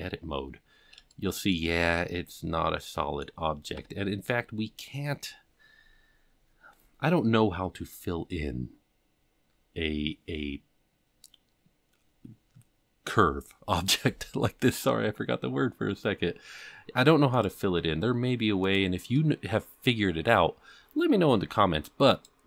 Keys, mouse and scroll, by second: 0.2-0.8 scroll up 5, 1.1 shift+middle click, 1.8-3.2 middle drag, 3.7 KP_7, 4.4-4.9 scroll down 5, 15.0 Tab, 17.3 click, 18.6 click, 22.1 click.